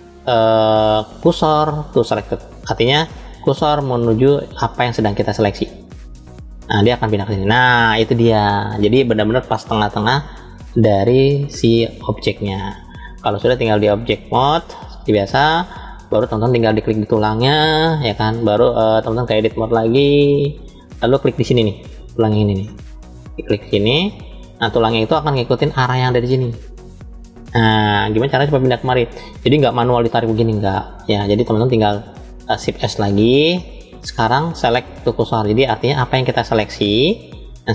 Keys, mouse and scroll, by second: 13.9-14.8 drag, 15.9 click, 19.2-20.3 drag, 22.7-24.1 drag, 24.8-25.7 scroll up 1, 29.4-30.7 drag, 32.9 shift+s.